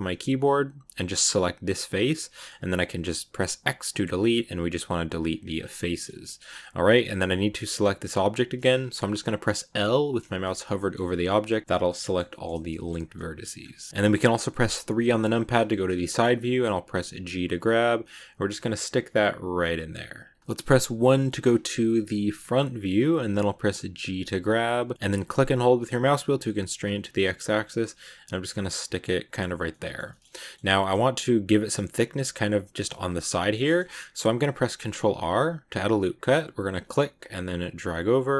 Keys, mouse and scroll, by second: 1.0 right click, 1.7 middle click, 2.5 x, 5.4 scroll down 2, 5.6 middle click, 6.3 scroll down 2, 6.5-9.5 middle drag, 10.3-15.1 middle drag, 15.1 KP_3, 15.9 shift+middle click, 16.1-17.0 scroll up 2, 17.0 g, 20.4 click, 20.8 KP_1, 22.0 scroll down 2, 22.8-24.0 scroll up 1, 24.0 g, 29.4 scroll down 2, 29.6 middle click, 30.1-32.7 scroll up 4, 30.2 middle click, 30.5 middle click, 32.7-34.7 middle drag, 34.7 ctrl+r.